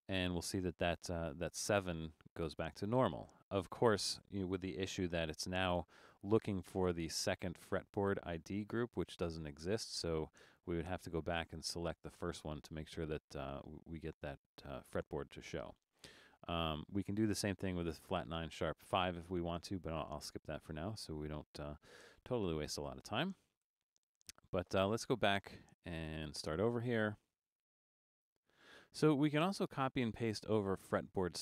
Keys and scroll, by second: 6.4 Return, 22.5 super+z, 22.9 super+z.